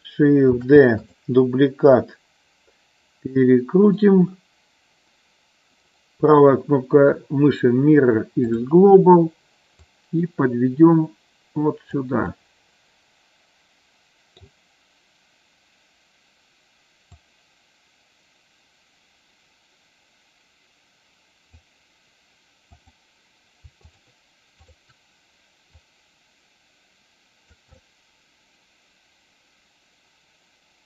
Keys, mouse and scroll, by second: 0.5 shift+d, 1.0 click, 2.0-4.0 middle drag, 5.7-8.6 right drag, 9.9-12.0 drag, 12.2-14.5 middle drag, 17.1-21.5 drag, 23.9 shift+click, 24.6 shift+click, 25.7-27.5 drag, 27.8-30.8 middle drag.